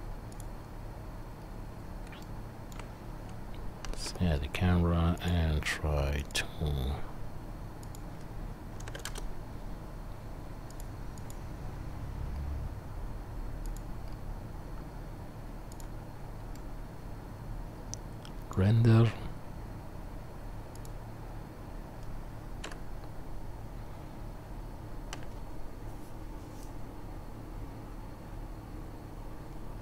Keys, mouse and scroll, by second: 1.4 middle click, 1.8-2.4 shift+right drag, 2.0-2.7 shift+middle drag, 2.7-9.3 shift+right drag, 4.0 n, 5.2 click, 5.2 middle click, 6.2-9.3 drag, 6.2-10.8 middle drag, 10.8-29.8 right drag, 11.2 click, 11.2 middle click, 13.6 click, 13.6 middle click, 15.7 click, 15.7 middle click, 22.9 F12.